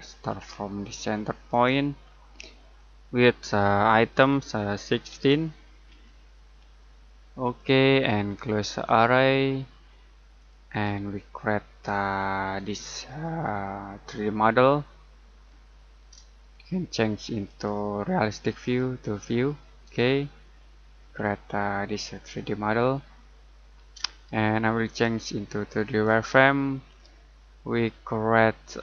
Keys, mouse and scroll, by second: 0.2-1.5 scroll up 1, 1.5 click, 2.1-2.7 scroll down 1, 2.7 middle click, 5.1-6.3 typing, 7.4 click, 11.2 middle click, 13.0 middle click, 16.1 middle click, 17.4 click, 21.2 shift+middle click, 24.8 click, 26.9 middle click, 27.6-28.8 scroll up 1.